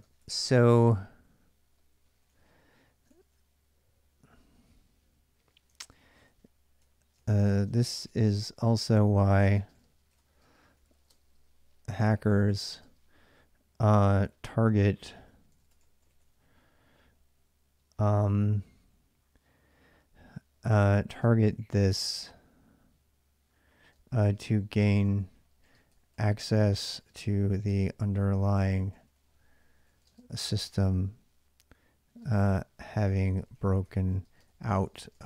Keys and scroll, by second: 0.0-3.4 typing, 5.5 ctrl+[, 5.7-13.0 typing, 14.2-16.6 typing, 21.0-22.0 typing, 23.7-31.0 typing, 32.0-35.2 typing.